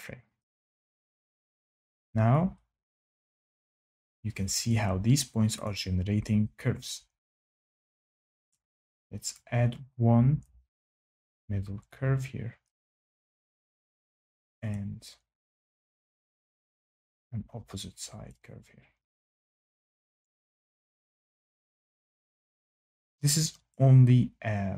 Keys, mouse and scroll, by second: 1.6 click, 5.6 click, 8.4 click, 13.4 click, 14.7 click, 18.2 click, 20.0 click, 20.7 click, 21.4 click, 23.6 click.